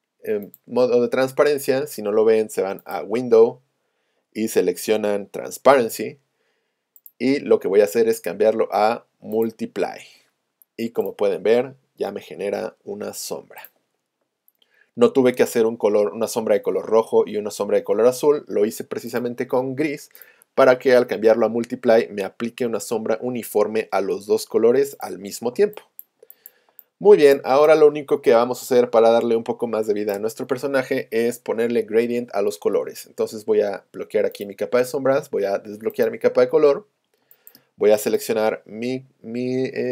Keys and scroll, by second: 25.6 space, 37.3 space.